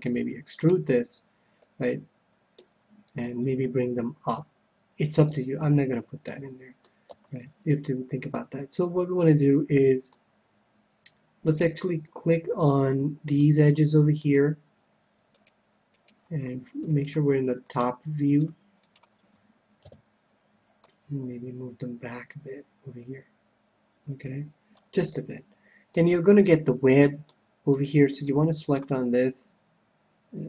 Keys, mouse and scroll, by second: 0.0 e, 1.6-2.9 middle drag, 2.9-4.7 drag, 5.2 ctrl+z, 5.6 ctrl+z, 6.2-7.9 middle drag, 7.0 a, 8.2-10.0 middle drag, 11.4-13.1 right drag, 13.2-14.9 drag, 14.2-20.4 right drag, 19.8 KP_7, 20.8-22.4 drag, 25.1-28.1 middle drag, 28.5-30.3 right drag.